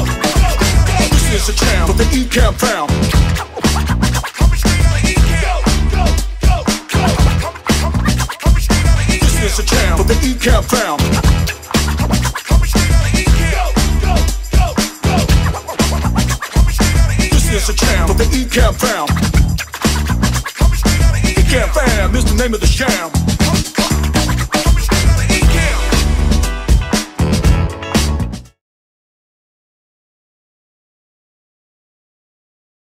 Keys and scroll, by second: 0.9-2.1 typing.